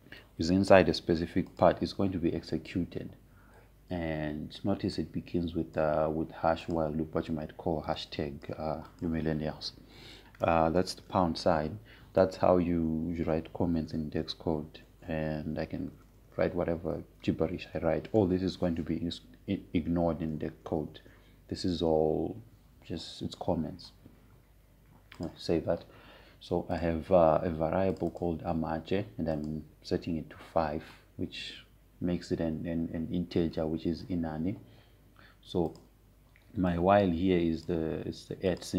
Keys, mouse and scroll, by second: 3.1 click, 6.7-10.6 drag, 12.1 Return, 12.6 shift+3, 17.2-18.6 typing, 18.7 Return, 19.9 shift+3, 21.2-24.0 typing, 25.8 typing, 26.9 click, 37.3-38.7 drag.